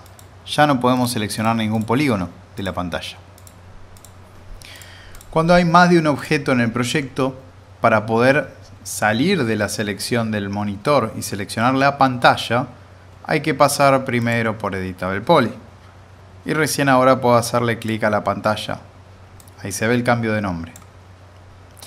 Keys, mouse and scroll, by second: 0.0 click, 16.4 click, 17.8 click, 18.0-20.9 drag.